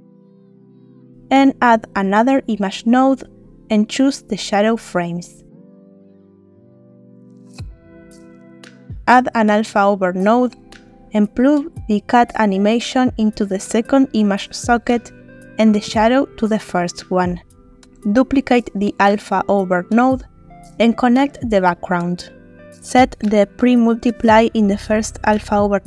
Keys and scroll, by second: 1.2 shift+a, 1.9 i, 2.2 m, 9.2 shift+a, 9.8 shift+a, 10.2 shift+l, 10.5 shift+p, 19.0 shift+d.